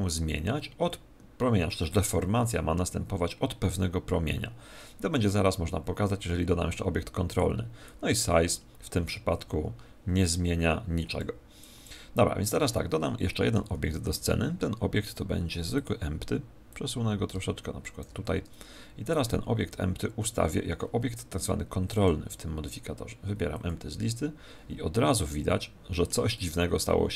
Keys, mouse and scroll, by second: 7.8-9.7 drag, 11.5 click, 13.1 middle click, 13.7 shift+a, 15.3 shift+a, 16.7 click, 19.0 right click, 21.9-23.7 drag, 25.1-27.1 middle drag.